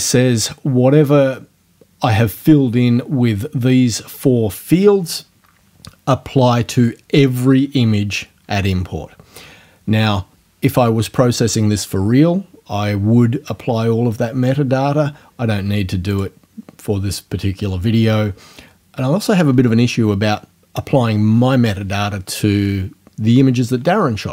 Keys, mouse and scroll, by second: 16.1 click.